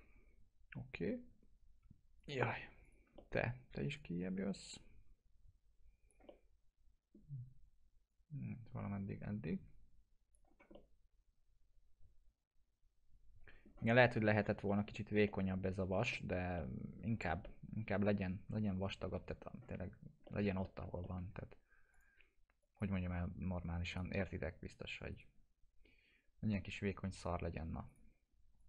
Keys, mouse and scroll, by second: 1.3 typing, 2.2 click, 2.6 typing, 2.9 click, 3.2 alt+middle click, 4.0-6.2 drag, 6.3-7.2 alt+middle drag, 8.1-10.6 drag, 10.5 scroll down 1, 10.8-13.9 alt+middle drag, 13.9 scroll up 1, 14.3 alt+middle click, 14.7 middle click, 16.6-17.2 alt+middle click, 17.1 scroll down 1, 17.5-19.0 alt+middle drag, 19.0 scroll up 1, 20.3 alt+middle click, 20.7 middle click, 21.0 alt+middle click, 21.9 click, 25.1 right click, 27.9-28.6 drag.